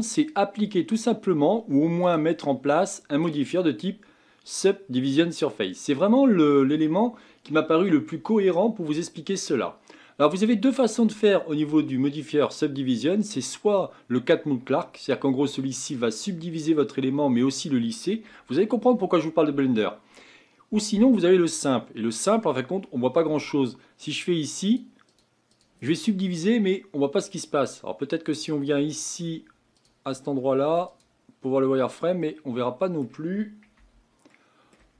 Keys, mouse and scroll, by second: 0.3-2.1 drag, 3.2-15.5 drag, 15.5-16.2 middle drag, 16.2-19.5 scroll up 5, 22.1 click, 24.6-26.3 drag, 26.3-28.3 middle drag, 28.3 click, 29.8-31.0 drag, 31.8 scroll down 3, 32.2-33.8 middle drag, 33.8 Tab, 34.3 middle click, 34.8 Tab.